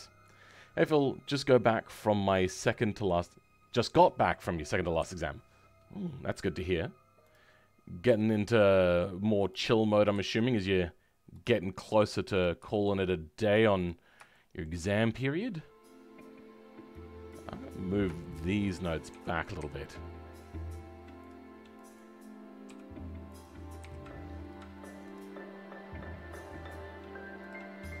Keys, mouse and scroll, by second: 5.6 scroll up 2, 7.2 click, 8.1 g, 10.0 click, 10.1 g, 12.4 click, 12.6 g, 14.0 scroll down 2, 14.3-17.2 shift+middle drag, 17.2 click, 19.1 g, 21.9 click, 22.7 g, 23.7 KP_1, 25.0-27.6 drag, 27.6-28.0 scroll down 2.